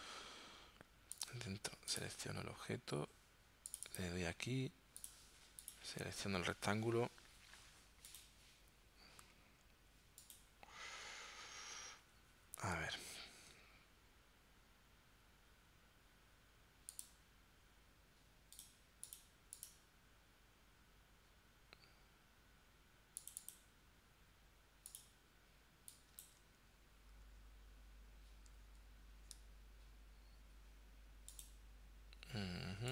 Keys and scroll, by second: 28.6 super+z.